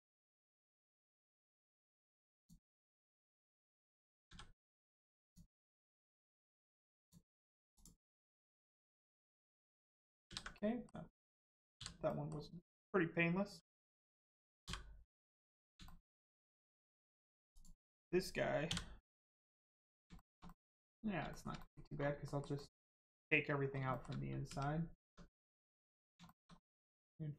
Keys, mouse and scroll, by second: 0.8 click, 3.1 click, 5.2 click, 7.0 click, 7.7 click, 8.7 Tab, 9.1 middle click, 9.3-9.9 scroll down 1, 10.2 ctrl+s, 10.5 middle click, 15.3 click, 15.8 shift+middle click, 16.1 middle click, 16.1 middle click, 16.5 scroll up 1, 16.7 shift+middle click, 17.5 middle click, 19.1 middle click, 19.4 shift+middle click, 19.8 middle click, 19.9 middle click, 20.1 shift+middle click, 20.4 middle click, 20.8-21.1 scroll up 1, 21.3 shift+middle click, 21.5 middle click, 21.6 middle click, 21.9 scroll down 1, 22.2 middle click, 23.5 scroll up 1, 23.9 shift+middle click, 24.4 middle click, 25.0 Tab, 25.3 middle click, 26.2 shift+middle click, 26.5 scroll down 1.